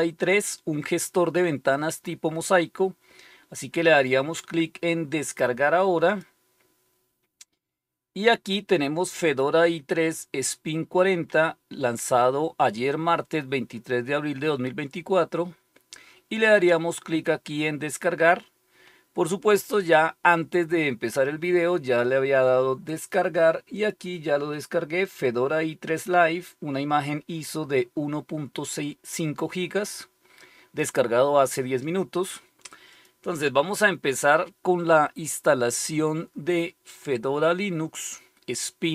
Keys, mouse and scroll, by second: 6.0 click, 15.2-15.6 scroll down 1, 16.4-23.6 scroll down 1, 23.6 click, 32.8 click, 36.8-37.4 scroll up 2, 37.4-38.9 scroll up 1.